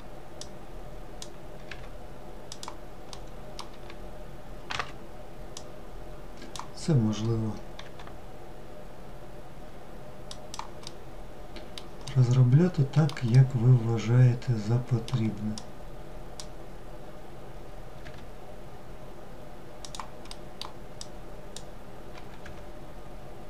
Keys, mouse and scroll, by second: 2.0 middle click, 2.6 g, 4.4 click, 9.7-14.4 middle drag, 14.4 click, 19.2 middle click, 19.9 click, 23.1-23.4 middle drag.